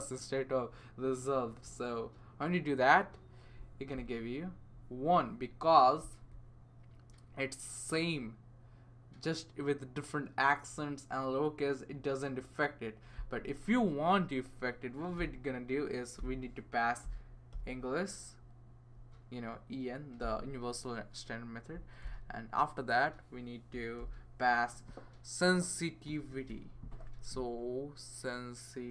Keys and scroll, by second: 15.2-17.5 typing, 18.9 Right, 20.2 ,, 22.0 typing, 23.4-24.2 typing, 25.8-26.6 typing, 28.6-28.9 typing.